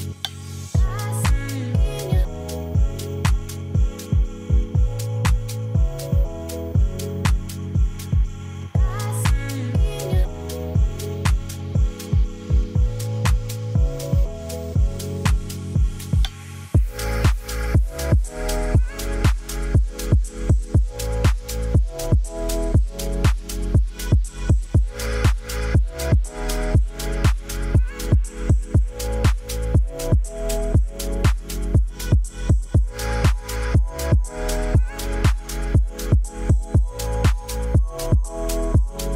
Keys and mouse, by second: 1.1 click, 4.5 click, 5.4-6.5 drag, 7.3 Tab, 8.5 KP_Divide, 9.2 middle click, 9.6 click, 10.4 shift+click, 11.9 shift+click, 12.2 shift+click, 12.4 shift+click, 12.6 shift+click, 13.6 shift+click, 13.9 shift+click, 14.1 shift+click, 14.3 shift+click, 14.7 shift+click, 15.3 ctrl+KP_Add, 15.9 middle click, 16.9 click, 17.4 click, 19.0 Tab, 19.0 KP_Divide, 20.9 ctrl+s, 22.2 middle click, 22.9 KP_0, 23.8 shift+middle click, 24.2 ctrl+s, 25.9-26.3 shift+middle drag, 26.8 shift+middle click, 27.5 ctrl+s, 29.0 KP_Decimal, 29.6 middle drag, 30.6 shift+middle click, 31.4 click, 31.7-35.5 drag, 32.8-34.7 typing.